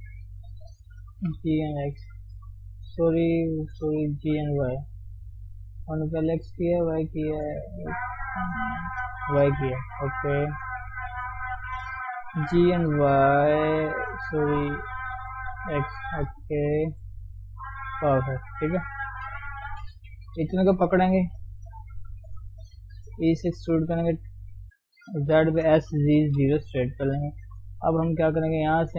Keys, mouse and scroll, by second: 1.2 g, 2.0 Tab, 2.8 ctrl+z, 3.1 ctrl+z, 4.3 g, 5.3-6.5 middle drag, 6.5 ctrl+z, 6.7 ctrl+z, 7.0 ctrl+z, 7.5 middle click, 8.1 ctrl+z, 8.8 ctrl+z, 10.2 click, 12.4 g, 15.9 middle click, 16.7 KP_3, 17.2 scroll up 1, 17.5 Tab, 18.0-18.5 scroll down 2, 18.5 Tab, 19.0 click, 19.5 scroll down 1, 19.7-21.2 shift+middle drag, 21.2 o, 21.5-22.0 scroll up 1, 22.0 shift+z, 22.3 shift+middle click, 22.7-23.1 scroll down 1, 23.1 e, 25.7 s, 27.1 Tab, 27.3 scroll down 2, 27.4 middle click, 28.0 shift+z, 28.2 middle click.